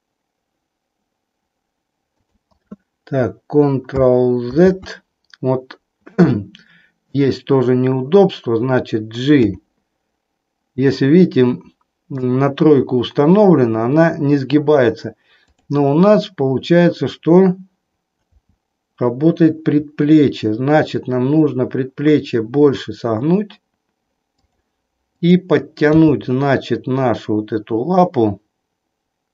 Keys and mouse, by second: 2.2 click, 4.7 ctrl+z, 9.3 g, 13.3 click, 18.2 r, 24.4 click, 25.2-26.3 drag, 26.3 g.